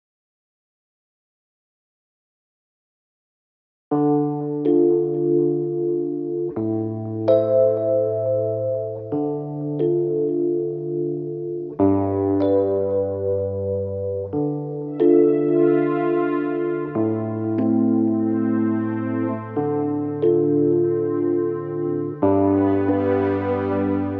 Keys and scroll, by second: 6.5 Delete, 17.4 Delete, 19.4 4.